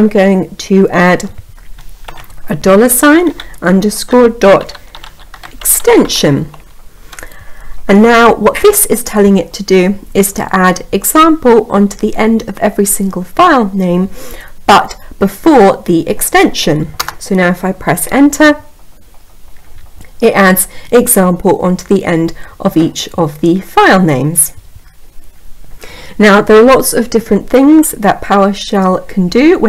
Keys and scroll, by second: 16.5 Return.